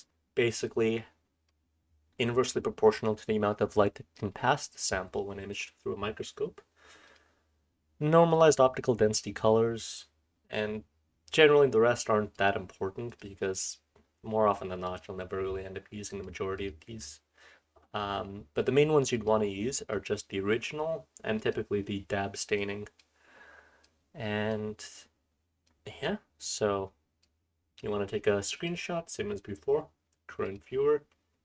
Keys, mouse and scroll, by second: 0.5-1.5 scroll up 1, 0.5-1.5 drag, 1.5-7.0 scroll up 1, 8.3-9.9 drag, 21.9-25.0 scroll down 3, 22.6-23.0 drag, 23.8-24.5 drag, 25.0-25.6 scroll up 2, 25.6-28.6 scroll up 1, 25.7 click, 27.2-27.8 drag, 28.6 click, 28.6-31.4 scroll up 1.